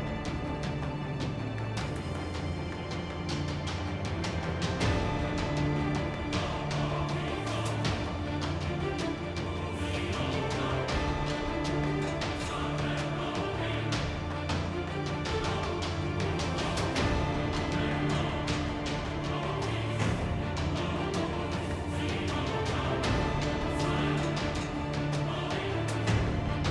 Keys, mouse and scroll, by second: 0.9 Tab, 1.3 Tab, 1.4 Tab, 3.7 Tab, 7.9 z, 8.1 z, 8.9 z, 9.8 z, 10.1 Tab, 11.3 KP_3, 11.8 space, 12.5 z, 13.5 middle click, 14.2 i, 14.9 click, 15.6 KP_1, 15.8 KP_3, 16.1 z, 16.9 F6, 19.1 i, 19.5 F6, 21.7 ctrl+Tab, 22.6 ctrl+Tab, 23.2 z, 24.1 g, 25.7 ctrl+z, 26.4 g.